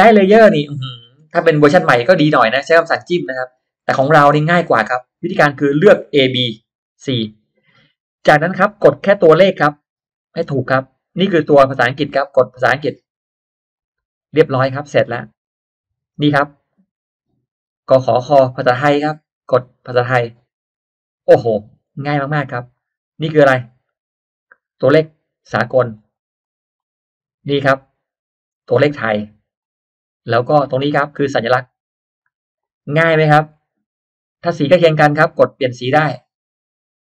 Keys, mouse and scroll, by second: 0.0 middle click, 0.2-0.5 scroll down 1, 0.7 scroll up 1, 1.0-1.4 scroll down 1, 3.8 scroll down 1, 4.2-5.2 middle drag, 5.2 click, 5.6-6.5 drag, 13.7 click, 14.8 click, 15.4 click, 20.4 click, 21.1 click, 21.4 scroll down 1, 21.8-22.7 scroll up 1, 22.0 middle click, 22.7 click, 25.9 click, 26.4 click, 26.7 click, 28.8 click, 29.6 click, 30.6 click, 32.2 click, 32.6 click, 33.0-33.4 scroll up 1, 33.2 middle click, 33.4 scroll down 1, 34.5 click.